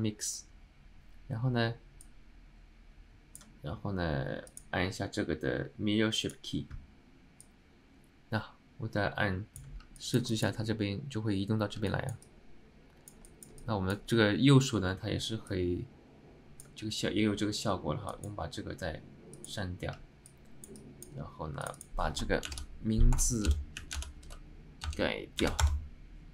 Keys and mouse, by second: 2.1-3.5 drag, 4.6-6.5 drag, 7.6-9.8 drag, 10.1 alt+middle click, 10.4 alt+shift+middle click, 12.0 middle click, 12.3-13.2 alt+middle drag, 13.4 shift+middle drag, 13.7-14.1 alt+middle drag, 15.6-16.8 drag, 18.2 click, 19.4 click, 20.4 alt+middle click, 20.9 alt+middle click, 21.8-26.3 drag.